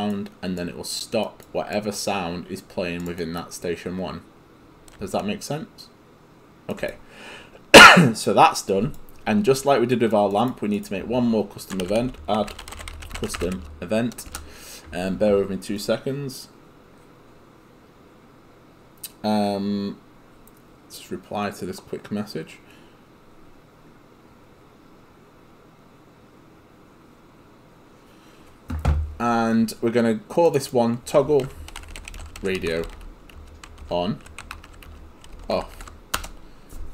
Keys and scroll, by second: 11.9-14.0 typing, 14.3 Return, 31.2-36.3 typing.